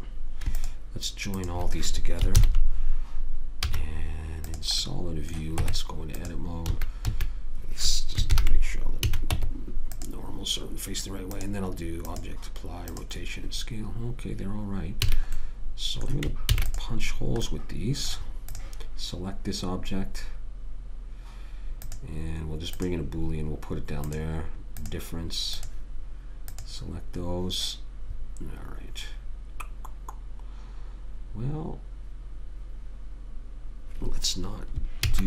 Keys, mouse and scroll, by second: 0.9-2.7 drag, 2.7 ctrl+j, 4.0 z, 5.9 Tab, 7.0 a, 7.4 a, 8.6 ctrl+n, 9.4 a, 9.7 Tab, 13.3 click, 15.4 a, 16.8 ctrl+s, 18.9 click, 22.1 click.